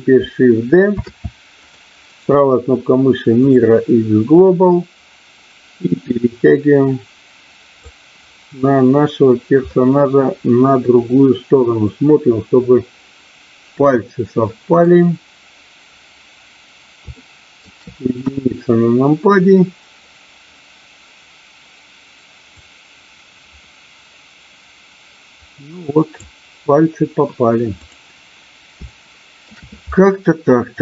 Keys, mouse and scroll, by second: 0.9 shift+d, 1.7 click, 2.2-3.5 right drag, 4.7-7.8 drag, 9.7-14.8 middle drag, 17.3 shift+middle click, 18.3 KP_1, 22.5-26.2 drag, 28.9 shift+middle click.